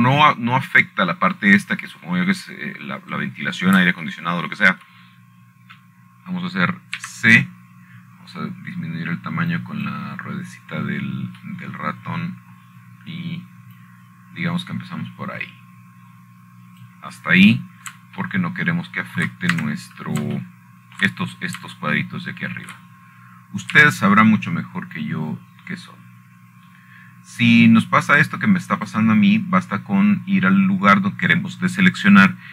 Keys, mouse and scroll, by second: 0.8 shift+middle click, 2.1-3.1 shift+middle drag, 6.1-7.1 scroll up 4, 7.5-8.6 shift+middle drag, 9.7 c, 10.5-11.8 scroll up 2, 12.3-13.6 drag, 15.3 middle click, 16.5-20.4 drag, 21.9-23.0 shift+middle drag, 22.3 Escape, 23.8 shift+middle click, 25.4 shift+middle click, 26.5 c, 27.7-31.7 drag.